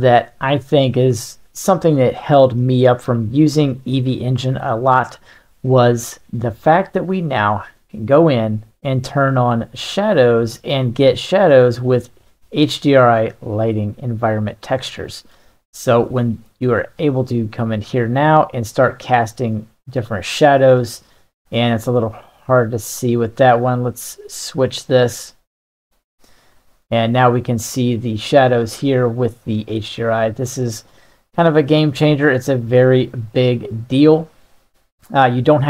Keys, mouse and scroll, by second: 2.6-4.7 middle drag, 9.7 click, 10.8 middle drag, 11.8-14.3 drag, 14.7-15.3 middle drag, 16.2-25.7 drag, 26.5-26.9 middle drag, 28.1-35.6 drag.